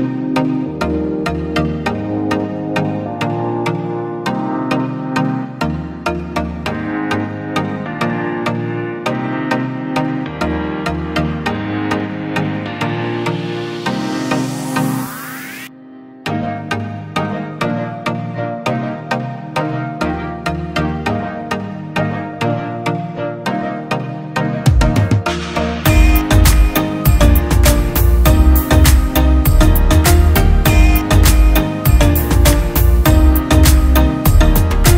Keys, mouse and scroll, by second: 8.0 alt+click, 16.2 right click, 17.7 double click, 24.5 right click, 26.6-27.5 scroll.